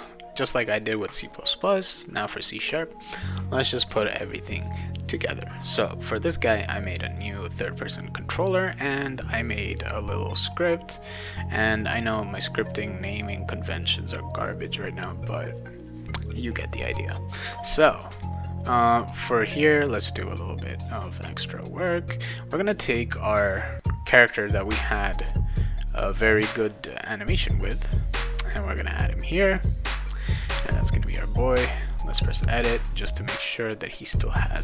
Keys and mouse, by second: 4.5 click, 5.7 click, 7.0 click, 7.1 click, 8.5 click, 11.2 click, 20.8 click, 23.8-25.9 drag, 27.8 click, 29.5 click, 30.3 click, 31.8 click.